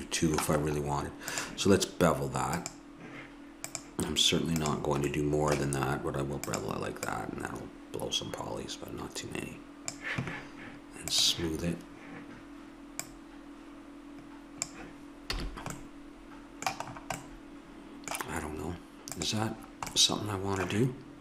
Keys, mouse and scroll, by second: 1.3-5.5 drag, 6.5-10.5 drag, 11.1-12.9 drag, 13.0-15.4 drag, 15.4 a, 17.4 click, 19.1-21.0 drag.